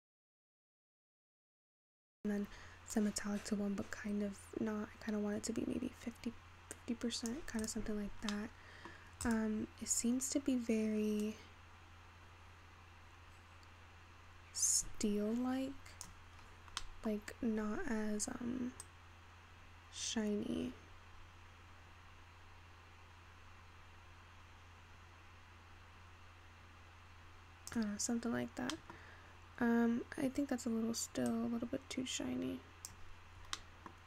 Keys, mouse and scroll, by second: 3.0-6.5 drag, 7.6 click, 8.3 scroll up 1, 8.4-9.2 middle drag, 9.2 scroll up 1, 9.4 click, 9.9-10.6 scroll down 3, 11.4-14.3 drag, 16.5-16.9 scroll up 6, 16.9 middle click, 17.4-18.9 scroll down 4, 18.9-22.0 drag, 28.4 scroll down 3, 29.1-31.5 scroll up 3, 31.5-33.8 drag, 33.8 middle click.